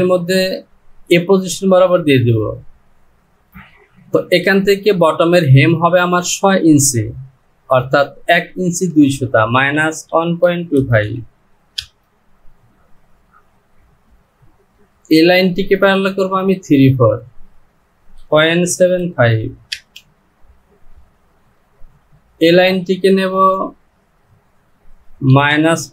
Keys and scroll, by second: 9.0 Down, 9.6 KP_Subtract, 11.8 Return, 17.4 Down, 24.1 Down.